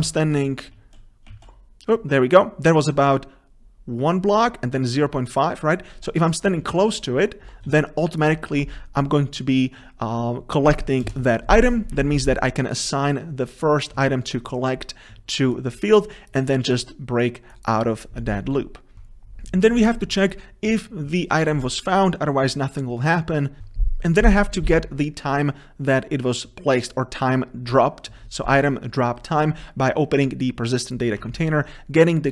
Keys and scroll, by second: 19.0 ctrl+c, 23.6 ctrl+c.